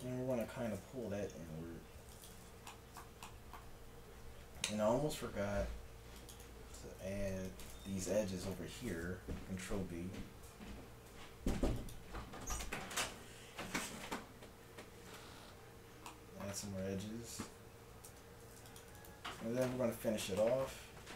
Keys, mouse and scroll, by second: 0.4 click, 1.1 g, 2.7-5.2 drag, 4.6 ctrl+r, 7.1 ctrl+r, 8.5-9.6 drag, 9.6 ctrl+b, 15.3 a, 16.2 click, 17.8 middle click, 18.1 ctrl+Tab, 19.0-21.1 drag, 19.7 KP_1.